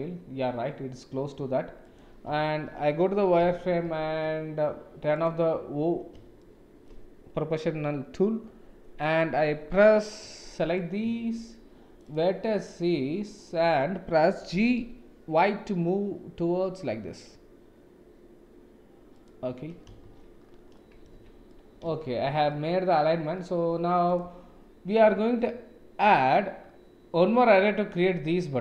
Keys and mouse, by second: 1.9 click, 2.5 Tab, 3.4 KP_7, 3.8 shift+z, 5.1 click, 6.4 shift+click, 6.8 shift+middle click, 10.7 click, 12.7 click, 14.5 g, 20.0 shift+z, 20.7 click, 21.2 Tab, 21.4 click, 21.6 middle click, 22.1 ctrl+s, 22.5 middle click, 24.1 click.